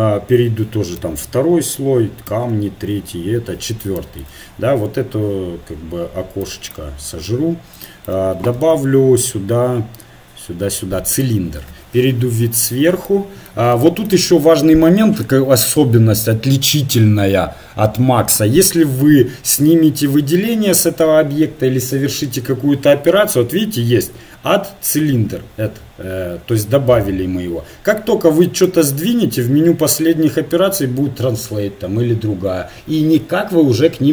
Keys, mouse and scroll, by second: 1.0 2, 2.3 3, 3.1 4, 4.0-6.3 middle drag, 6.7-8.4 drag, 8.6 shift+a, 12.0 KP_7, 13.0-17.5 middle drag, 28.4 right click, 29.2-30.2 drag.